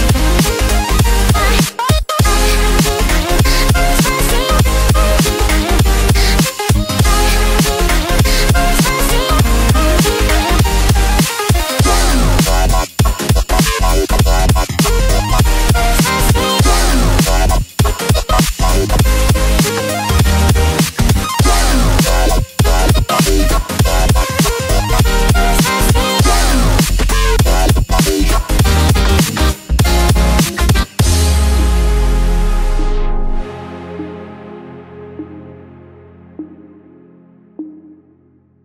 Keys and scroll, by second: 1.0 [, 8.3 ctrl+t.